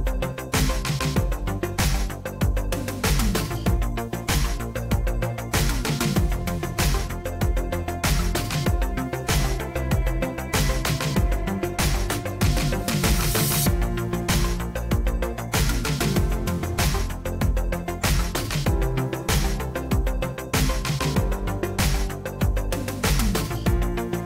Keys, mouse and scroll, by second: 0.0-0.9 typing, 1.2 Return, 8.6-10.5 typing, 11.1 Return, 13.3-15.7 typing, 15.1 Return, 16.8-17.6 typing, 18.8-21.1 typing, 21.5 Tab, 22.5-23.2 typing.